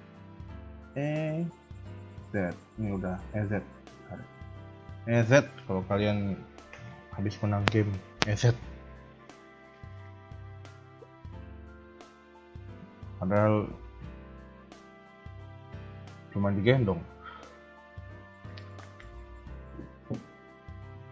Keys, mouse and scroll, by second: 0.1 shift+middle click, 0.9 e.